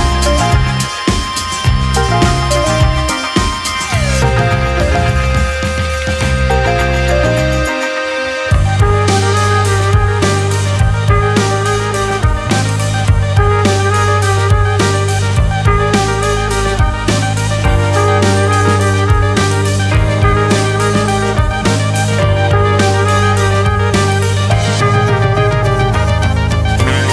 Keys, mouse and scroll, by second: 1.3 click, 2.7 alt+z, 3.1 scroll down 1, 3.2 middle click, 4.0 alt+s, 8.4 Tab, 8.6-9.2 scroll down 7, 9.4-10.3 middle drag, 10.3 space, 11.0 space, 11.2-14.2 middle drag, 14.2-16.9 drag, 16.9 Tab, 17.2-17.8 scroll up 3, 17.8 s, 18.6 alt+s, 18.8 Tab, 19.3 space, 19.7 space, 20.3-21.2 scroll down 5, 21.2-22.9 middle drag, 22.9 right click, 23.9 click, 24.2 scroll down 3, 24.4-27.1 middle drag.